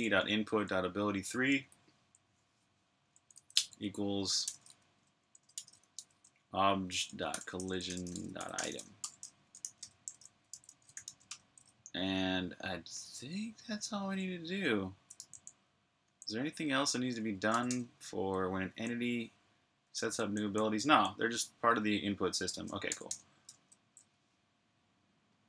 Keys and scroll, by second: 0.0-0.3 typing, 1.4-2.2 typing, 5.2-10.4 typing, 13.1 typing, 15.0 super+j, 17.1-18.5 typing, 19.7 j, 20.8-21.9 typing, 25.0 typing.